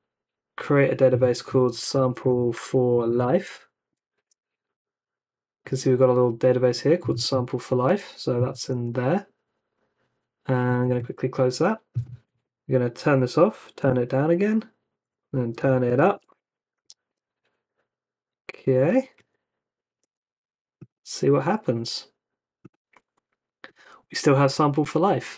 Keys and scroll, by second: 1.3-3.9 typing, 4.1 Return, 10.9 super+w, 12.3 ctrl+c, 13.1 Up, 13.8 Return, 14.9 Up, 15.5-17.3 typing, 19.1 super+Tab.